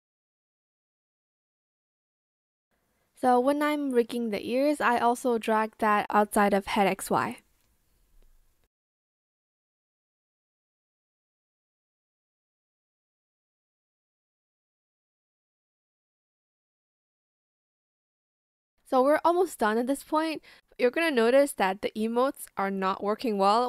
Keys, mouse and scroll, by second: 0.4 Return, 2.2 ctrl+z, 2.9 ctrl+z, 4.7 ctrl+z, 4.8 ctrl+z, 7.7 ctrl+z, 8.3 Return, 9.4 Return, 11.4 ctrl+shift+z, 13.1 Return, 13.6 shift+click, 17.1 Return.